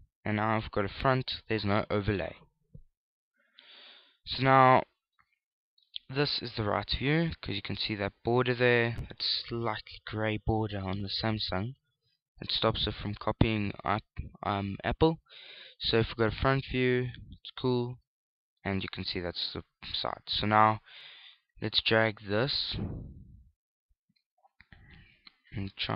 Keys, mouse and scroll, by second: 1.6 KP_1, 2.5 KP_3, 5.9 shift+middle click, 10.1 middle click, 11.4 KP_1, 12.4 KP_3, 16.3 KP_1, 17.6-18.3 shift+scroll up 1, 18.8 shift+middle click, 20.8 KP_3, 23.1 click.